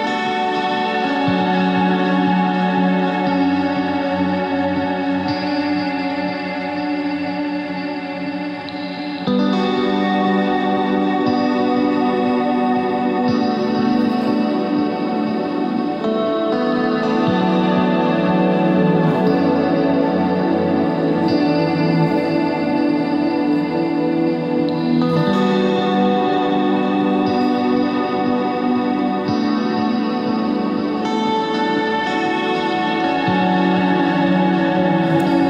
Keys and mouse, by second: 1.6 ctrl+r, 2.9 ctrl+Tab, 8.3 e, 10.1 click, 10.6 s, 10.8 click, 12.3 s, 15.7 Tab, 17.4 Tab, 17.8 KP_3, 18.3 KP_1, 18.9 ctrl+Tab, 19.5 z, 20.1 c, 21.7 z, 23.2-25.6 typing, 27.8 ctrl+Tab.